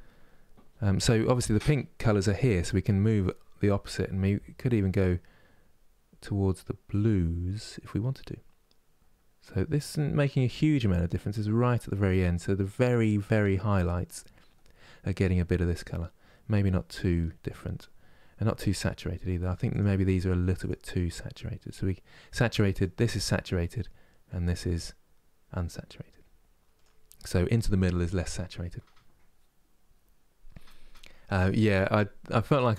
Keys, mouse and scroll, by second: 19.5-22.5 drag.